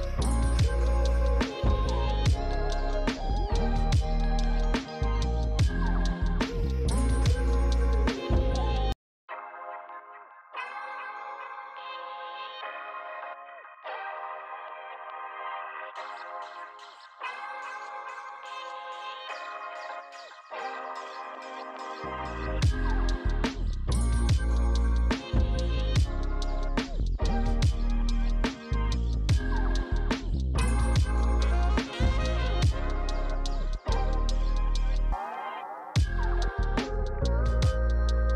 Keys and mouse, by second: 0.0-3.9 typing, 0.1 click, 0.6 click, 0.8 click, 1.2 click, 2.1 click, 2.4 click, 2.8 click, 3.7 click, 10.0 click, 13.1 click, 13.4 Tab, 14.9 click, 18.0 alt+click, 18.8 alt+shift+click, 19.7 ctrl+z, 19.9 alt+shift+click, 20.4 ctrl+z, 20.7 alt+shift+click, 21.3 alt+shift+click, 22.8 click, 23.6 s, 24.4 click, 24.7 ctrl+z, 25.1 Tab, 25.2 click, 28.3 click, 29.3 click, 31.2 f, 31.2 click, 31.7 f, 32.5 click, 32.9 shift+Num_Lock, 32.9 click, 33.2 shift+click, 34.3 f, 34.4 click, 36.4 f, 36.4 click.